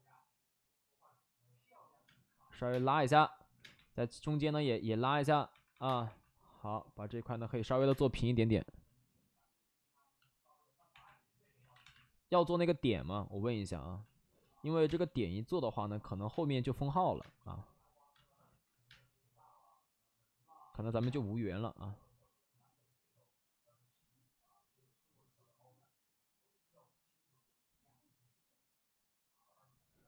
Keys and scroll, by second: 2.3-3.6 typing, 5.0-6.0 typing, 7.2 ctrl+z, 7.8 space, 7.8 1, 8.3 space, 8.4 space, 10.8 1, 11.5 ctrl+z, 11.7 1, 14.7 1, 14.8 5, 14.8 space, 16.2 space, 16.7 space, 16.8 space, 18.4 ctrl+z, 18.8 space, 20.6 ctrl+z, 20.8 ctrl+z, 20.9 space.